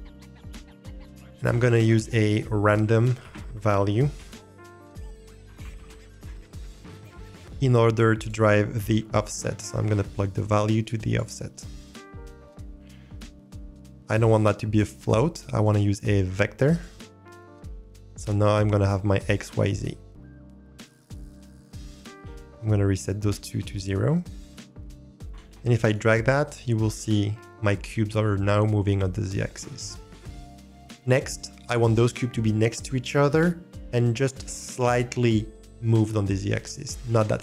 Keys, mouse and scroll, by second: 0.9 click, 1.6 shift+a, 9.6-11.1 drag, 12.3 middle click, 15.5-16.8 drag, 21.7-23.9 drag, 25.1 click, 25.3 ctrl+z, 28.9 click, 30.0-30.6 middle drag.